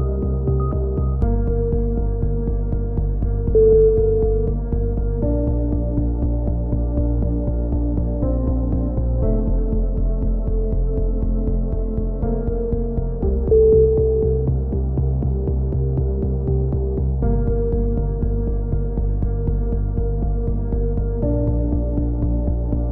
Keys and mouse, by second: 0.5-1.5 right drag, 2.6-3.6 right drag, 4.0 click, 5.6-6.6 drag, 6.6 f, 7.2 a, 8.2 click, 9.0-10.1 right drag, 9.9 x, 11.3 z, 11.8 a, 13.1 z, 14.3 click, 14.8 right click, 15.1 x, 15.2 click, 16.4 right click, 17.2-18.3 middle drag, 18.3 right click, 19.1 f, 19.9 right click, 20.9 right click, 21.6 f.